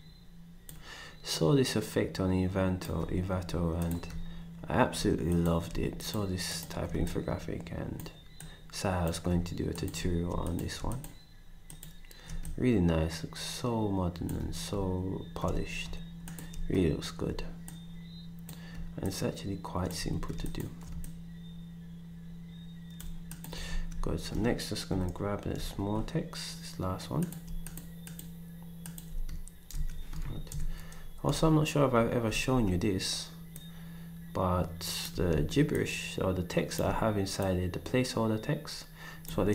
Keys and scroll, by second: 19.9 ctrl+shift+super+z, 23.6 ctrl+s, 24.9 Down, 29.7 ctrl+shift+c, 30.5 Up, 32.3 v.